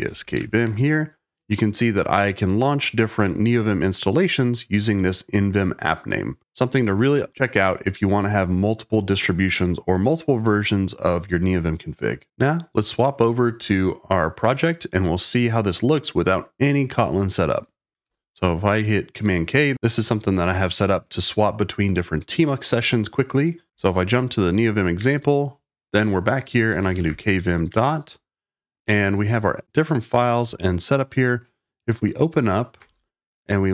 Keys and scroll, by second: 0.0-0.8 typing, 18.0 super+k, 23.8 Page_Down, 24.9 Return, 26.4-27.8 typing, 30.2 typing, 32.6-33.3 typing.